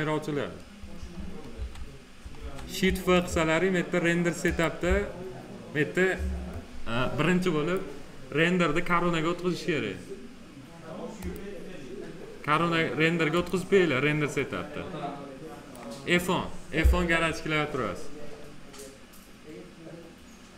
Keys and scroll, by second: 1.3 shift+f.